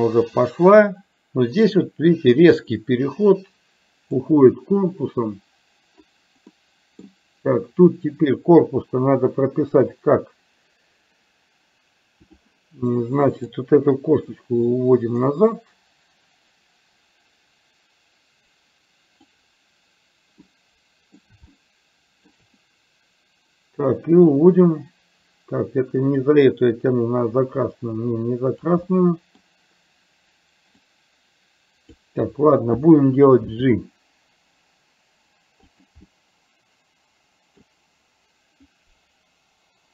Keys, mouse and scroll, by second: 6.7 middle click, 12.4 click, 13.5 click, 14.9-19.5 drag, 20.6-22.4 middle drag, 21.2-21.6 scroll down 1, 21.6-22.4 shift+scroll up 1, 24.0-26.2 drag, 27.2-28.7 drag, 29.0-30.9 middle drag, 30.9-32.1 drag, 33.5 g, 36.2-37.7 middle drag.